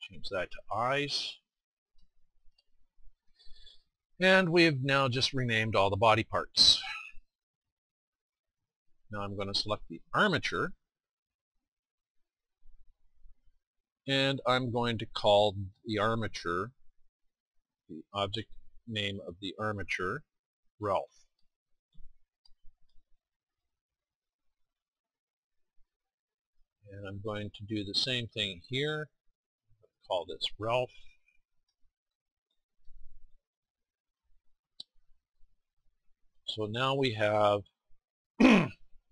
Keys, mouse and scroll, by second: 2.4-6.0 middle drag, 5.4 scroll up 1, 7.7-9.4 middle drag, 11.4-16.4 drag, 16.5-23.4 drag, 28.0-37.4 drag, 37.4-39.1 middle drag.